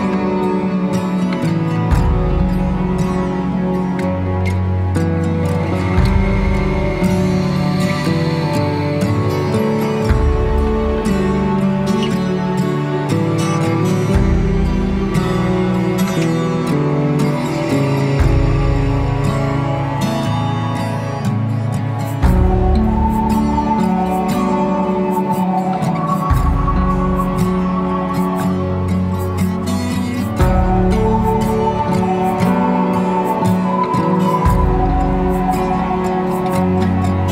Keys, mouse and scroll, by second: 0.0-2.0 drag, 4.7 click, 6.0-8.0 drag, 8.0 scroll up 1, 9.0 shift+middle click, 10.0 click, 10.6 b, 12.6 Delete, 13.9 b, 18.0 Delete, 20.6-21.9 middle drag, 21.9-22.6 scroll up 2, 22.6 a, 28.2-29.4 middle drag, 30.9 click, 31.8 click, 32.3 middle click, 32.9-33.3 scroll up 2, 33.3 middle click, 34.1-35.2 drag, 35.2 shift+d, 36.2 click.